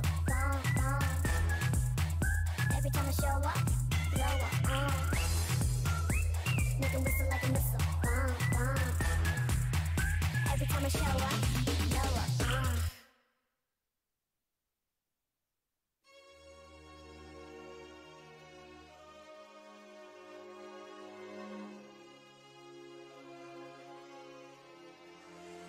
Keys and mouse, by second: 0.5 g, 1.1 s, 2.4 s, 3.1 g, 4.1 a, 4.3 Tab, 5.1 Tab, 5.7 Tab, 10.1 right click, 10.2 Tab, 10.9 a, 11.0 c, 11.7 w, 13.3 Tab.